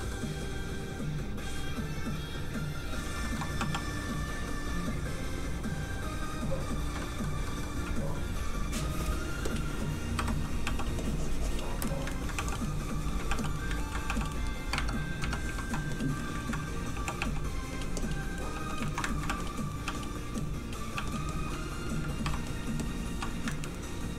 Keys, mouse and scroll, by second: 0.0 middle click, 1.5 click, 3.2 shift+middle click, 3.6 middle click, 3.7 click, 4.3 ctrl+click, 7.0 click, 7.1 middle click, 9.5 click, 10.1 i, 10.6 f, 10.8 click, 12.0 middle click, 12.1 ctrl+middle click, 12.4 middle click, 12.5 click, 12.6 middle click, 13.0 ctrl+middle click, 13.4 f, 13.7 ctrl+middle click, 14.1 ctrl+f, 14.2 click, 14.3 middle click, 14.7 alt+Tab, 15.9 Tab, 16.2 middle click, 16.4 ctrl+middle click, 17.2 f, 17.2 g, 17.7 click, 18.4 middle click, 18.5 f, 18.7 click, 18.9 shift+middle click, 19.1 ctrl+middle click, 19.3 ctrl+f, 19.4 click, 19.6 middle click, 19.8 f, 19.9 click, 20.9 f, 21.1 click, 21.3 click, 22.2 i, 22.4 click, 23.5 ctrl+middle click.